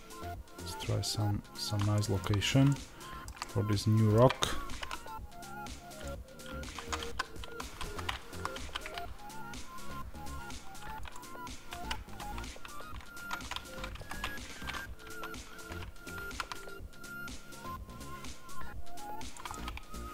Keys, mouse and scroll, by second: 1.5 click, 1.8-20.1 shift+middle drag, 4.6 g.